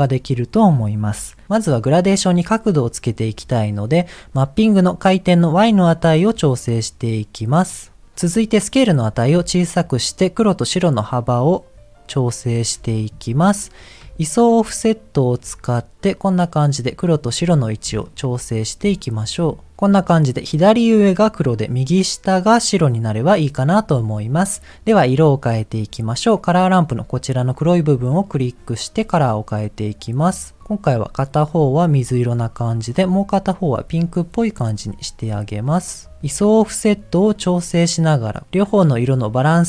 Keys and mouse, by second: 4.0 click, 5.5-8.1 drag, 9.5-12.4 drag, 14.4-17.3 drag, 18.2 middle click, 19.1 middle click, 25.9 click, 27.4 click, 32.3 click, 32.9 click, 36.4-39.6 drag.